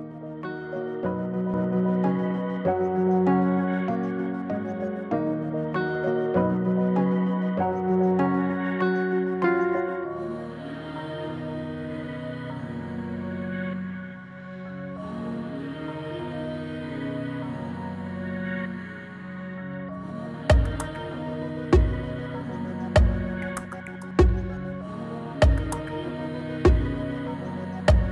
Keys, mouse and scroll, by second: 10.0-10.6 click, 12.5-13.8 click, 13.5 space, 14.8-17.4 drag, 25.3 space.